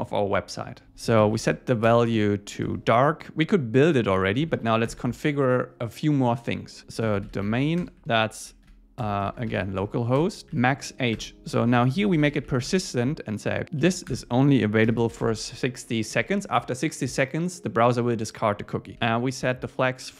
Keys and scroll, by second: 0.8 Return, 2.6 Tab, 4.4 Up, 4.6 super+Right, 4.9 Return, 6.8 shift+super+Left, 7.8 Return, 9.8 Tab, 10.2 Return, 11.2 Return, 13.8 Down, 14.1 Return, 15.2 Escape, 16.1 Right, 18.9 Return.